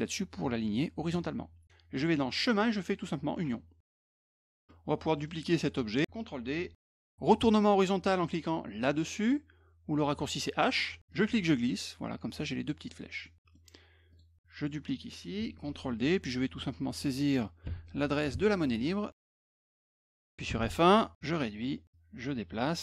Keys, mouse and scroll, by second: 1.1 click, 2.5 click, 3.4 click, 4.6-6.2 middle drag, 6.9 ctrl+d, 10.7 click, 11.1-12.9 drag, 13.2 middle click, 14.1 click, 16.0 click, 17.6 t, 18.3 ctrl+a, 19.1 BackSpace, 19.4 shift+:, 20.2 f, 20.5 F1, 21.2 ctrl+shift+click, 21.9-22.8 drag.